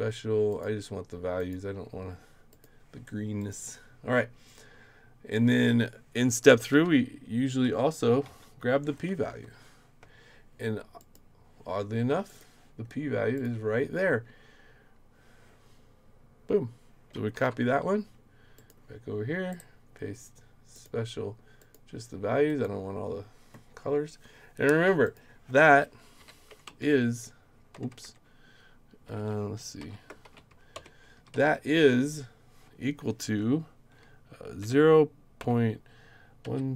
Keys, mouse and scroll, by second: 0.5 click, 1.4 click, 2.5 click, 3.4 click, 6.7-8.8 typing, 9.3 Right, 11.0 click, 12.3 click, 13.3 click, 17.3 ctrl+c, 18.6 click, 19.5 right click, 20.7 click, 21.6 click, 22.5 click, 25.0 click, 26.2 =, 26.6 Right, 27.7 BackSpace, 27.9 BackSpace, 28.0 BackSpace, 29.2 shift+', 29.8 =, 30.2 shift+', 30.7 Return, 31.1 Up, 31.3 Right, 34.6 0, 35.4 ., 36.4-36.7 typing.